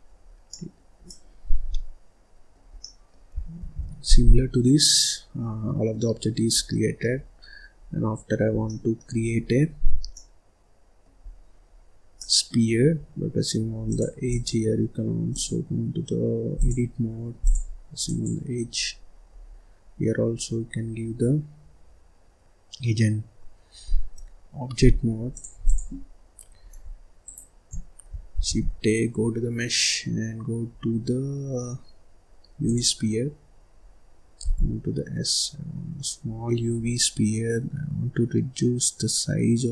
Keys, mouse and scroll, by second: 0.0-0.5 scroll down 1, 0.5-2.7 middle drag, 2.7 scroll down 1, 2.8 middle click, 3.6 ctrl+s, 4.1 scroll down 3, 4.4-4.9 scroll up 1, 4.9-6.2 middle drag, 6.2-6.5 scroll up 1, 6.5 scroll down 2, 6.6 middle click, 7.3-8.5 scroll up 6, 8.5 scroll down 1, 8.6 middle click, 9.2-9.6 scroll down 1, 9.6-10.1 scroll up 3, 10.1-11.2 middle drag, 11.2-11.7 scroll down 1, 11.7-12.1 scroll up 1, 12.1 middle click, 12.6-13.8 scroll up 3, 13.8 click, 15.2-17.4 drag, 18.0 click, 18.7-19.2 scroll up 3, 19.2-19.6 scroll down 2, 19.8-22.9 scroll up 2, 25.3-27.3 drag, 27.3-28.3 shift+right drag, 28.3 shift+a, 33.2-33.7 scroll down 5, 33.7-34.3 scroll up 2, 34.3 s.